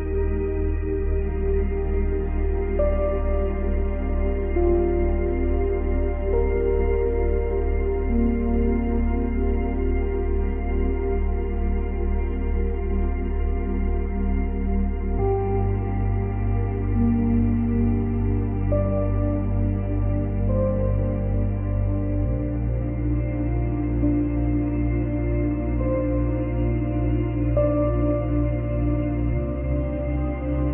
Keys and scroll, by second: 1.6 space, 6.7 space, 8.1 space, 9.0 ctrl+c, 9.2 ctrl+v, 16.1 space, 18.1 space, 23.8 space, 26.5 space.